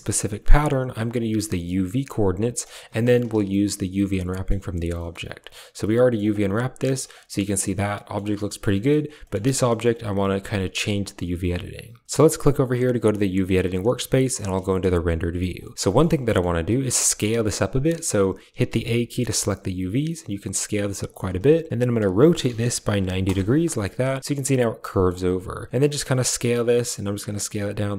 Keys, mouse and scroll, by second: 1.0 click, 2.7 g, 3.2 a, 3.5-4.4 drag, 4.7 drag, 5.0 click, 5.8 click, 6.5-7.0 middle drag, 7.0 click, 7.7 click, 8.1 shift+drag, 8.4 drag, 8.7 shift+drag, 9.1 click, 9.6 click, 13.8 z, 14.5 shift+click, 15.8 shift+click, 16.1 click, 16.7 s, 18.5 a, 19.6 s, 21.9 r, 23.5 click, 24.7 click, 25.7 s.